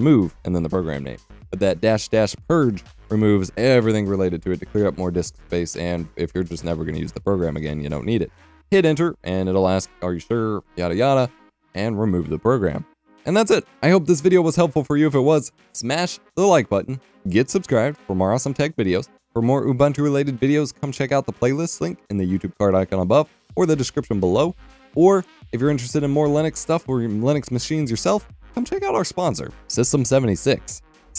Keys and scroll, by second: 0.0-0.2 typing, 9.8-10.9 typing, 11.1 Return, 13.6 F12, 14.4-15.9 typing, 17.7 Escape, 18.3 Escape.